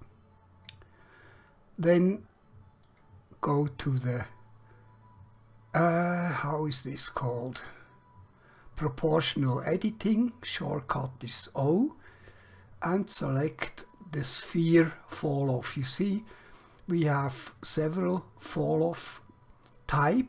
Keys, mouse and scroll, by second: 12.3 click.